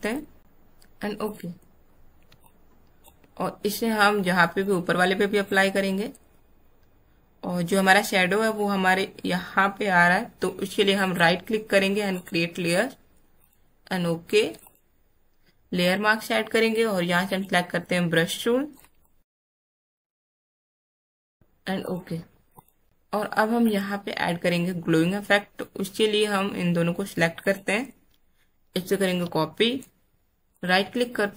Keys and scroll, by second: 2.3 space, 19.2 alt+space, 20.1 Caps_Lock, 29.0 ctrl+j.